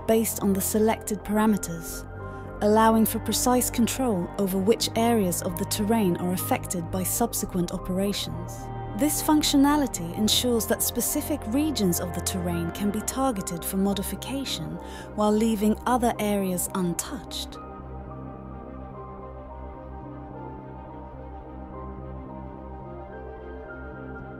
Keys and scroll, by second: 0.0-0.9 typing, 17.6-18.5 typing, 18.8 Down, 18.9 Return, 22.7-24.3 typing.